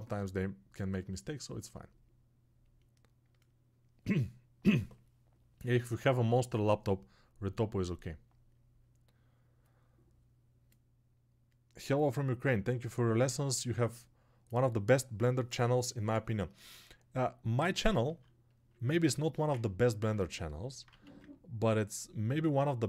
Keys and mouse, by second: 18.9-22.8 alt+shift+drag.